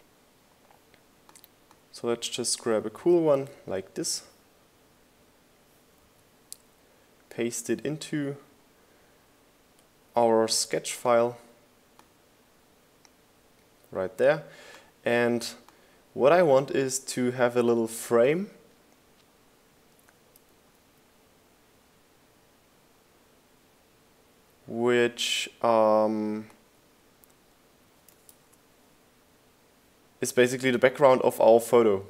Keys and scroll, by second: 9.1 super+v, 30.4 super+z.